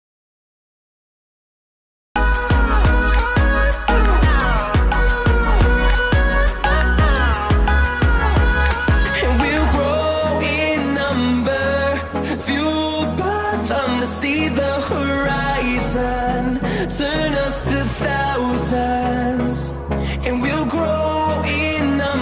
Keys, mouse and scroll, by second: 0.9-4.5 drag, 4.5-7.9 drag, 9.1 scroll down 1, 10.2 scroll up 1, 11.4-13.6 drag, 13.7 ctrl+right click, 16.5-21.4 drag.